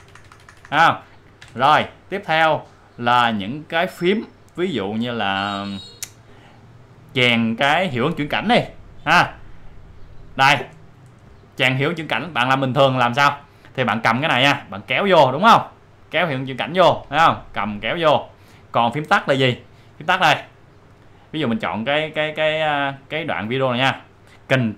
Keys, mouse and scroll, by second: 1.4 Down, 10.3 click, 14.4-17.0 drag, 17.6-21.0 drag, 22.5 click.